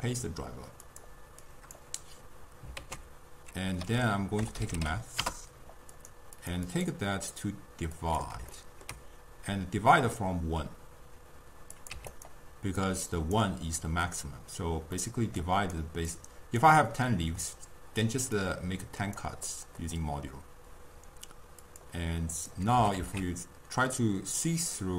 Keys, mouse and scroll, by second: 1.5-2.8 drag, 2.8 ctrl+a, 6.4 click, 6.7-8.6 drag, 8.6-11.6 ctrl+middle drag, 11.8 click, 12.8-15.0 drag, 15.0 middle click, 15.4 click, 16.1 click, 18.4-19.5 drag, 19.5-21.6 middle drag, 21.6 click, 22.4 click, 22.8 g.